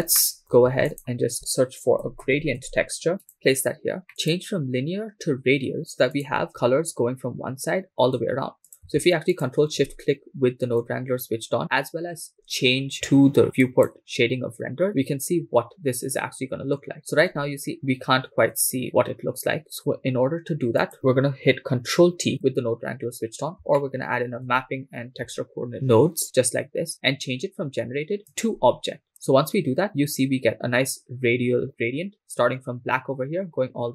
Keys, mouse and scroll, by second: 0.2 middle click, 0.7 shift+a, 4.1 middle click, 4.2-6.3 drag, 8.7 click, 9.4 ctrl+shift+click, 11.6 scroll down 2, 13.9 click, 16.9 shift+middle click, 20.8 click, 22.0 ctrl+t, 24.6 shift+middle click, 25.7 shift+middle click, 28.3-29.1 drag.